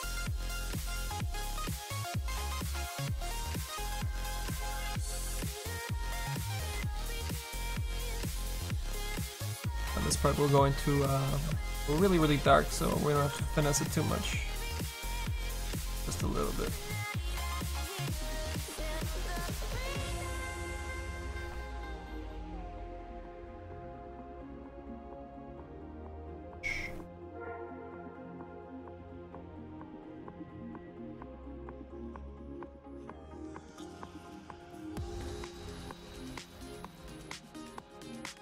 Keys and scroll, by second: 19.7 s, 36.8 s.